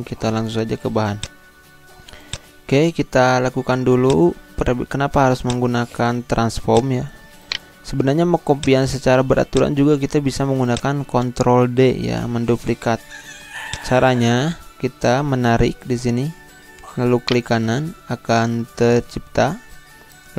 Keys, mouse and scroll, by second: 1.1 click, 2.6 scroll down 1, 4.1 click, 6.6 click, 7.4 right click, 8.6 click, 13.7-17.2 drag, 17.2 shift+right click.